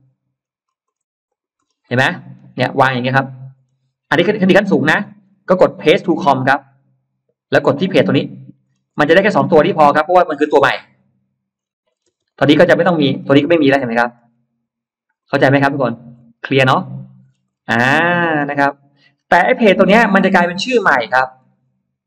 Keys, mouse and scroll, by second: 0.3-1.0 scroll up 4, 1.2 shift+click, 1.4-1.8 scroll down 2, 1.8 middle click, 2.2-3.0 scroll down 2, 2.6 middle click, 4.2-5.4 scroll up 5, 6.5 click, 8.5-9.2 scroll down 3, 10.6 click, 11.4 scroll up 1, 11.9 scroll down 1, 12.0 space, 12.1 click, 12.8-14.5 scroll up 6, 13.4 middle click, 15.2 middle click, 15.6 scroll down 2, 16.0-16.3 scroll up 2, 16.5 click, 16.7 click, 17.1-18.2 scroll down 6, 19.7-20.5 scroll up 4, 21.2 click.